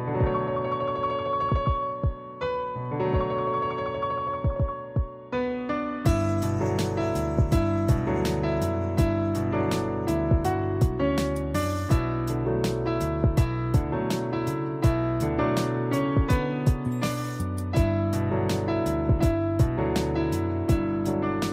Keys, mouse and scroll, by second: 4.6 space, 4.7 click, 6.1 ctrl+shift+click, 6.8 ctrl+e, 10.6 click, 12.8 click, 16.5 click, 16.5 click, 19.8 click.